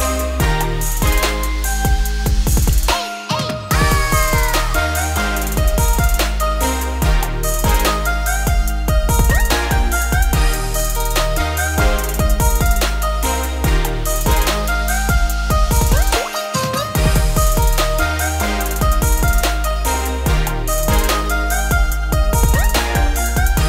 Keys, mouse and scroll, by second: 0.2-0.7 scroll down 2, 0.7 e, 4.2 Tab, 4.4-5.6 scroll up 2, 5.6 alt+x, 7.2 shift+middle drag, 7.4-7.8 scroll up 2, 7.8 ctrl+s, 9.1 click, 10.2 click, 11.3 click, 11.9-14.6 shift+drag, 15.1 ctrl+s, 15.5-18.9 scroll down 8, 18.9 scroll down 2, 20.0-21.5 scroll down 1, 21.5 ctrl+s.